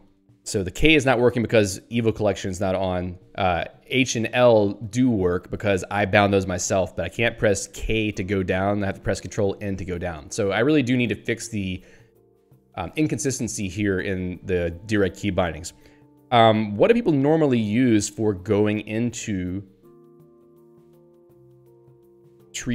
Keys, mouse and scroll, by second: 0.2 ctrl+g, 4.6 h, 6.1 l, 7.4 h, 9.2 ctrl+n, 11.3 ctrl+p, 15.6 ctrl+n, 16.5 ctrl+p, 19.9-22.0 typing.